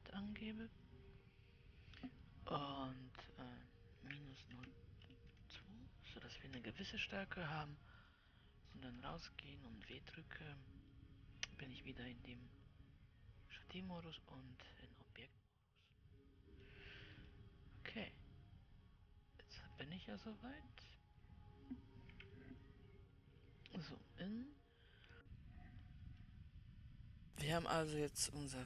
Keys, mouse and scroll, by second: 8.4-9.4 drag, 9.4 Tab, 10.3 w, 11.5-22.6 middle drag, 22.6 KP_Decimal, 24.3 middle click, 26.8-28.6 middle drag.